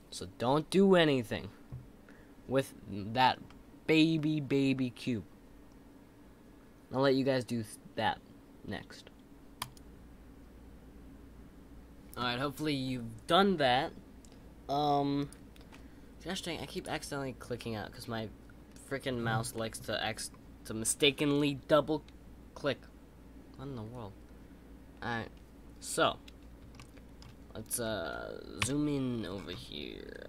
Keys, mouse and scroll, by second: 3.4-6.6 middle drag, 26.7-27.6 shift+middle drag, 27.6 click, 28.6 KP_Decimal, 29.3-30.2 scroll up 2.